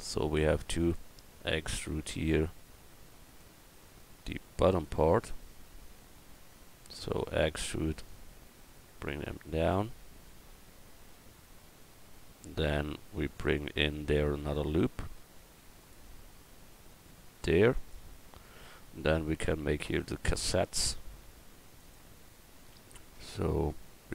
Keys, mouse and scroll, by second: 7.2 e, 14.8 ctrl+r, 21.8 click.